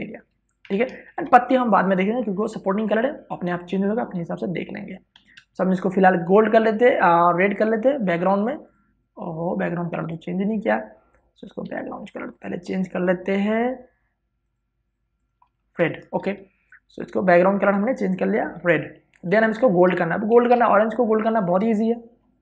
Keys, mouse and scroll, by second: 1.3 alt+BackSpace, 1.8 ctrl+d, 5.8 v, 6.0 space, 6.3 ctrl+click, 12.3 w, 13.0 click, 16.4 alt+BackSpace, 16.9 ctrl+d, 18.0 click, 20.6 space, 20.8 ctrl+click, 21.2 v, 21.8 click.